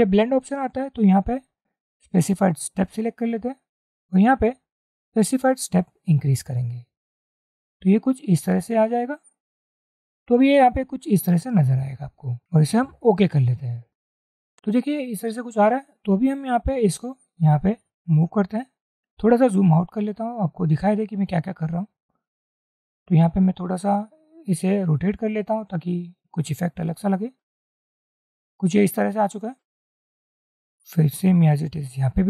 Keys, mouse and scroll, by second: 4.6-5.0 scroll up 1, 14.2 double click, 19.7-20.2 alt+scroll down 1, 20.3-21.5 scroll down 1, 21.5-22.0 scroll down 1, 22.0 scroll down 1, 22.2-26.5 drag, 30.5 alt+click.